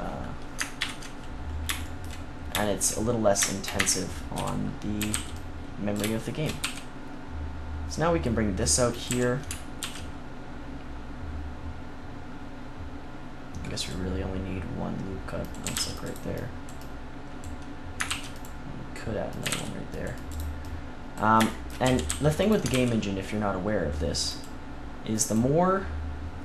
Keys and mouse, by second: 0.7 ctrl+KP_1, 3.7 Tab, 4.3 z, 4.9 a, 5.1 c, 6.0-7.2 right drag, 6.6 e, 9.0 click, 9.0 a, 9.7 ctrl+r, 10.6-12.3 drag, 15.4-16.8 drag, 15.6 a, 15.7 c, 18.0 ctrl+r, 19.3 click, 19.4 a, 19.4 c, 21.5 click, 21.8 a, 22.0 c, 22.6 ctrl+r.